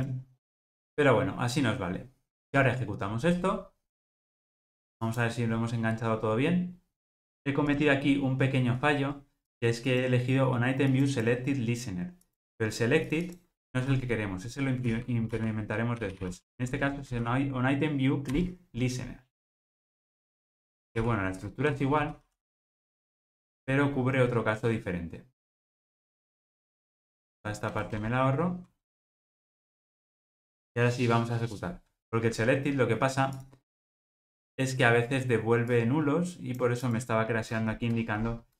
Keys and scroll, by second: 5.3 ctrl+r, 18.3 Return, 23.3 Return, 29.9 ctrl+r.